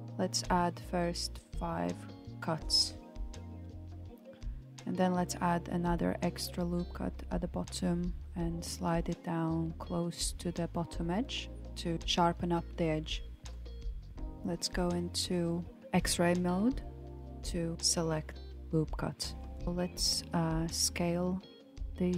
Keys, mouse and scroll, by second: 1.2 ctrl+r, 7.4 ctrl+r, 11.6 click, 13.2 alt+z, 13.8 click, 16.4 s.